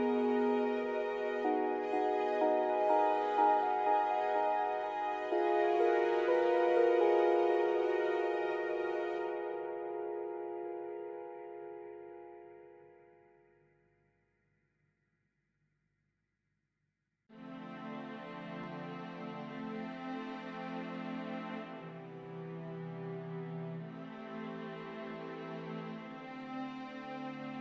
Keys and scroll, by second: 10.9 ctrl+z.